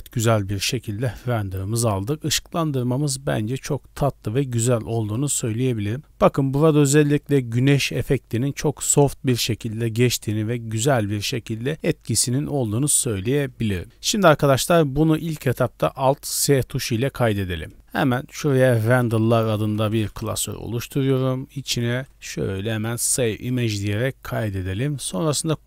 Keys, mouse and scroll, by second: 5.7 scroll up 2, 6.0 middle click, 13.0 scroll down 2, 13.1-13.8 middle drag, 13.8 ctrl+space, 14.7 middle click, 14.9 click, 16.5 alt+s.